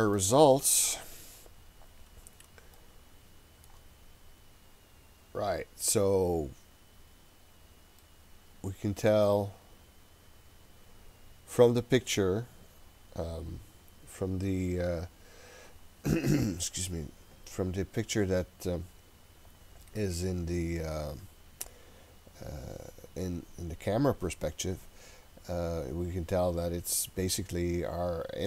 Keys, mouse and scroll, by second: 0.9-1.7 scroll up 4, 1.7-2.7 scroll down 1, 2.8-3.7 shift+middle drag, 4.0-4.8 scroll up 2, 4.8-5.8 scroll down 1, 8.0-11.5 middle drag.